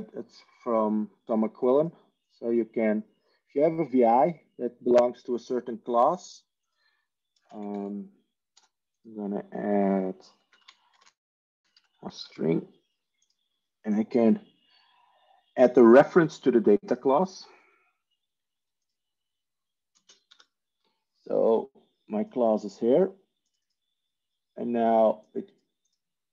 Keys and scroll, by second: 7.3 ctrl+space, 7.5-8.4 typing, 10.2-12.4 typing, 16.8 typing, 19.8 ctrl+space, 20.2 ctrl+g.